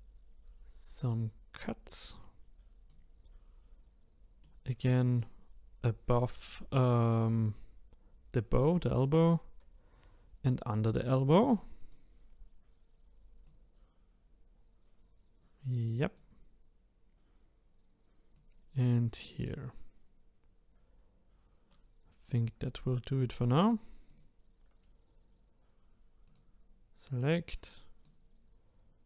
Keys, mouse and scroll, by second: 4.4-7.4 middle drag, 11.8 click, 13.4-16.6 drag, 18.3-21.3 drag, 24.1 click, 26.2-27.3 drag.